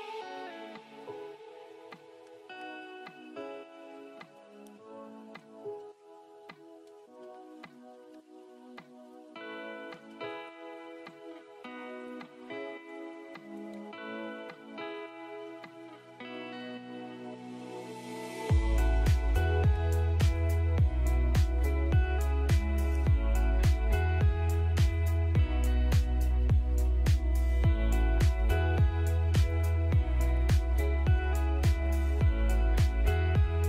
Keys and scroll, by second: 9.9 shift+F11, 12.3-13.2 typing, 14.0 Return, 14.7 F3, 15.2 space, 18.9 Escape, 22.3-24.6 typing, 24.0 F3, 26.0 ctrl+g, 27.0 ctrl+g, 28.4 ctrl+g, 29.6-30.4 typing, 31.3 ctrl+z, 32.2 Escape.